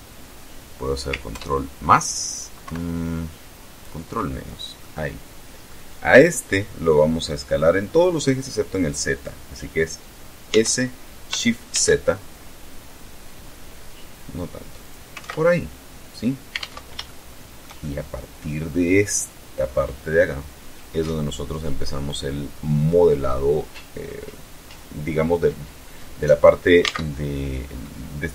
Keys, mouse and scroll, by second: 0.9 ctrl+KP_Add, 2.2 ctrl+KP_Subtract, 4.4-5.4 middle drag, 10.1 s, 11.3 shift+z, 14.4 click, 14.8 alt+Tab, 16.2 alt+Tab, 16.7 alt+shift+Tab, 16.7 alt+shift+middle click, 16.8-18.2 shift+drag, 18.3-18.6 scroll up 2, 26.5 alt+Tab, 27.3-27.6 scroll up 2.